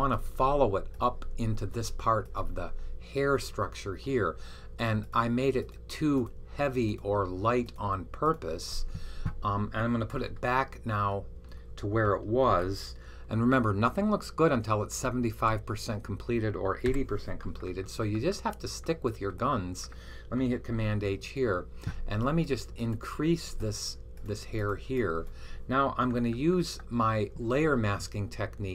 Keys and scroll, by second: 12.3 super+h, 13.6 Left, 14.1-15.3 typing, 16.7 typing, 21.0 super+h.